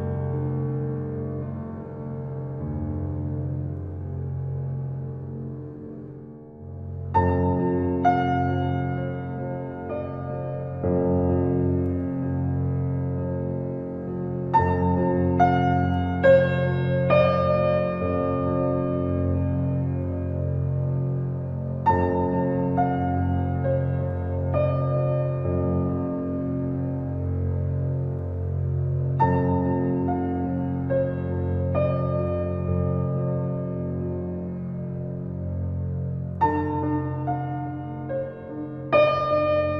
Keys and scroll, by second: 0.0 ctrl+u, 37.8 ctrl+l.